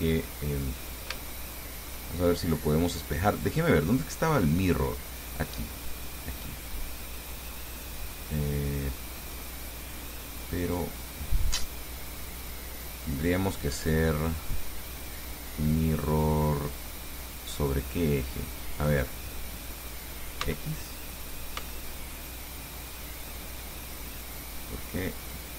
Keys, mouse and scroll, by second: 0.4-0.8 scroll up 2, 1.0 scroll down 2, 1.4 shift+click, 3.7 click, 6.3 click, 10.9 click, 14.0 click, 19.0 click, 20.7 x, 21.8 x, 23.3-24.3 drag, 25.4 click.